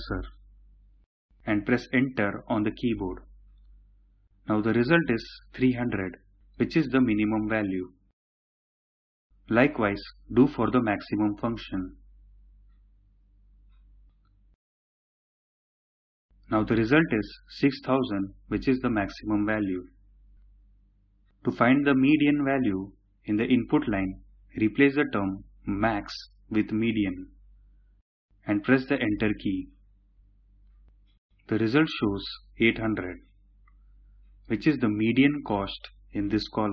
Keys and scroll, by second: 1.8 Return, 23.3 typing, 26.5-27.3 typing, 28.8 Return.